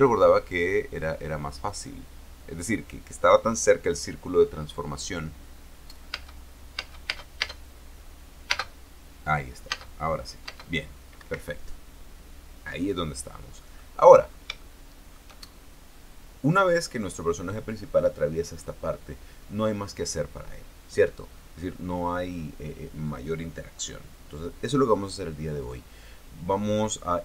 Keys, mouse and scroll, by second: 6.8 space, 9.2 space, 10.4 space, 11.2 space, 11.9 Escape, 14.3 click, 14.8 middle click, 15.3 shift+click, 16.5 scroll up 1, 17.5 right click.